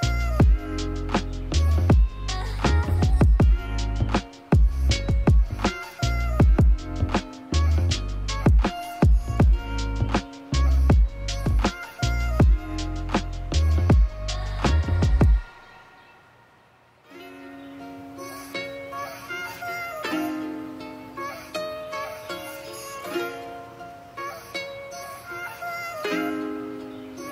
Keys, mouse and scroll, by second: 0.4-0.9 middle drag, 1.2-1.7 drag, 2.1-2.8 drag, 2.9 shift+middle click, 3.5-4.3 drag, 4.6-5.2 drag, 5.4-5.8 middle drag, 6.3 middle click, 6.8-8.1 middle drag, 7.6 drag, 8.8 middle click, 9.6 middle click, 10.0 shift+middle click, 10.3 middle click, 11.2-12.6 drag, 13.3 click, 13.6 middle click, 13.9-16.5 drag, 17.8 click, 25.3-26.7 drag, 26.7 middle click.